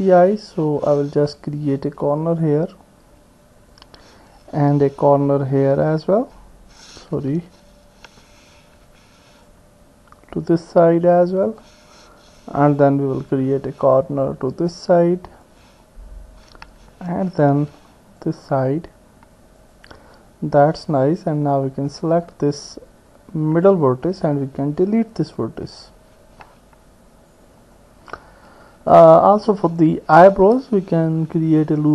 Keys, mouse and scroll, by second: 0.6 ctrl+r, 5.4 r, 8.8 ctrl+r, 13.3 ctrl+r, 17.4 ctrl+r, 22.1 click, 23.7 click, 25.2 Delete, 31.3 ctrl+r.